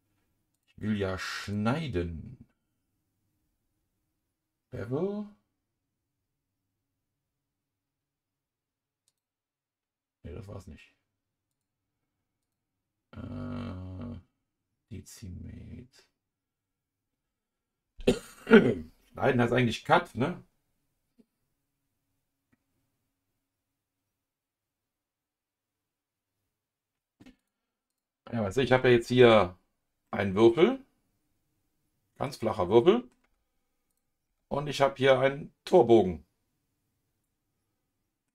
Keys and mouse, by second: 0.5 click, 1.4-12.3 drag, 12.4-26.8 drag, 29.2 KP_Divide, 30.0-32.2 middle drag, 32.8 middle click, 33.2 KP_Divide, 33.9 click, 34.3 KP_Divide, 34.7-38.3 middle drag.